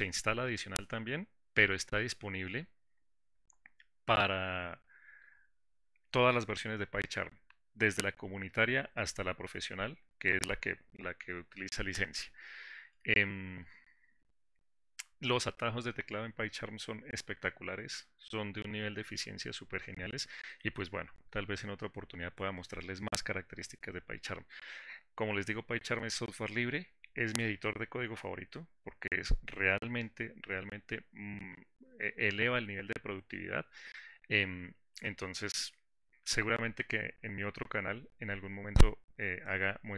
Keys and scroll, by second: 0.8 ctrl+shift+y.